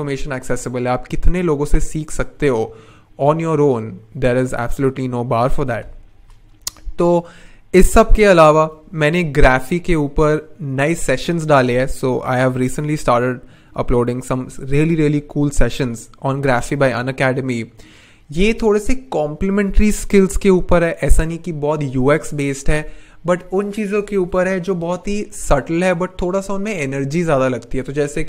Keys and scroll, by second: 5.8 n.